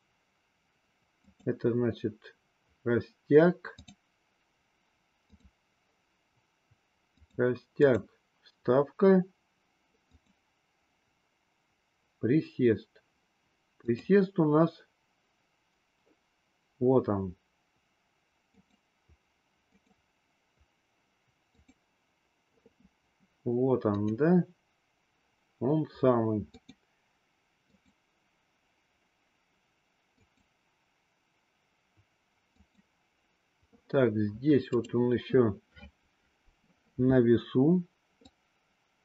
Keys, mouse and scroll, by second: 1.1 click, 3.8 click, 5.2 click, 7.1 click, 7.7 click, 10.1 click, 13.7 click, 18.6 click, 19.7 click, 21.4 click, 23.8 click, 26.6 click, 27.7 click, 30.1 click, 32.5 click, 34.7 click, 38.2-39.0 drag.